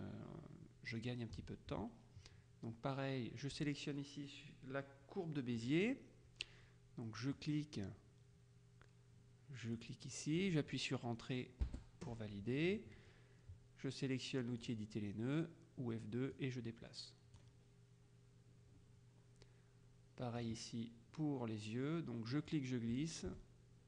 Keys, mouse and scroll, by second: 5.6 click, 7.4 click, 9.8 click, 11.7 Return, 14.7 click, 16.4-18.0 drag, 20.5 click, 22.6-23.8 drag.